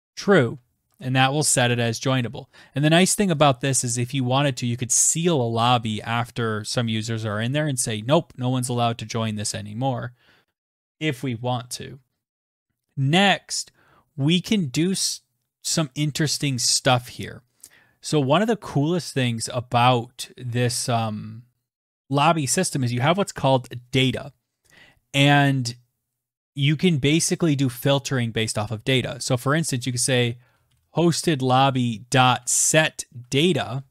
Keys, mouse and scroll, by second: 0.0-1.8 typing, 27.9-33.9 typing.